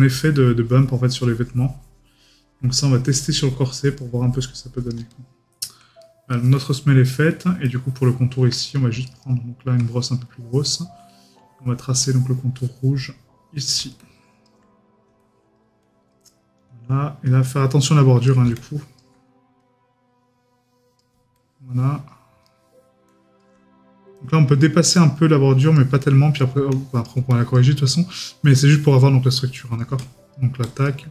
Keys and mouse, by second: 6.0 right click, 6.5 middle click, 7.1 right click, 7.6 middle click, 9.1 right click, 22.4 middle click.